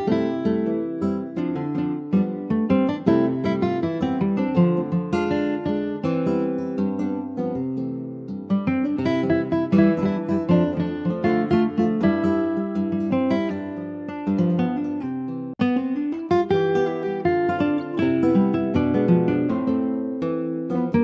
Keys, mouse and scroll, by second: 0.0 scroll down 2, 0.2 middle click, 1.0 ctrl+s, 1.1-2.3 middle drag, 2.3 ctrl+s, 2.4 click, 3.0 /, 3.6 click, 3.9 middle click, 4.9 scroll down 4, 5.3 click, 5.5 shift+middle click, 6.5 ctrl+s, 6.7-9.7 middle drag, 12.8 click, 13.3-14.3 scroll down 1, 14.3-15.6 middle drag, 15.6 ctrl+s, 15.9 click, 17.1 /, 17.9 shift+middle click, 18.1-18.6 scroll up 2, 18.6 middle click, 18.7-19.7 scroll up 2, 19.7 shift+middle click, 20.0-20.5 scroll up 2, 20.5 click, 20.8 Tab.